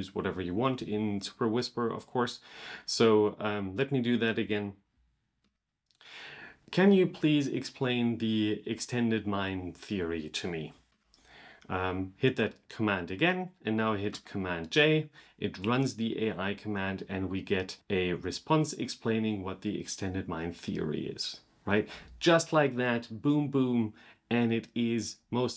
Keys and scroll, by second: 5.2 super+/, 10.7 super+/, 11.5 super+v, 13.9 super+j.